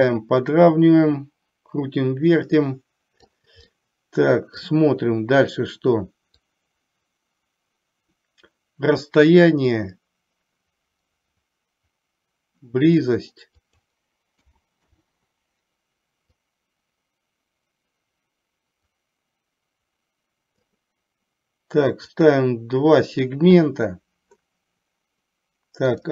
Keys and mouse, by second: 3.9 middle click, 6.5-9.3 drag, 9.9-13.2 drag, 13.8-15.0 drag, 16.5-20.8 drag, 22.2 click.